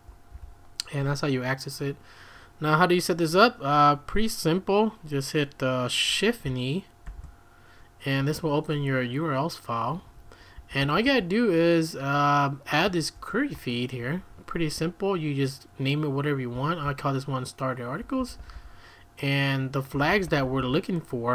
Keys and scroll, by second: 0.0-0.3 typing, 7.0 shift+e, 8.2 Escape, 8.3 Escape, 9.9 Escape, 10.1 Escape, 10.6 j, 10.8 j, 11.0 j, 13.2 shift+v, 14.0 Escape, 14.1 Escape, 14.5-21.3 typing.